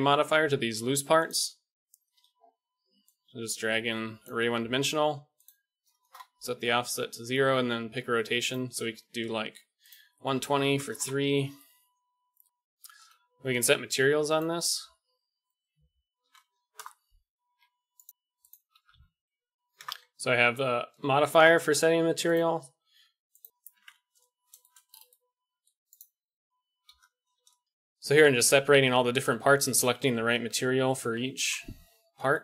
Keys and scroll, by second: 12.9 KP_1, 17.5 a, 18.9 s, 23.6 Tab, 24.7 ctrl+l, 24.8 p, 25.9 ctrl+l, 26.0 p, 26.3 Tab, 26.8 KP_1.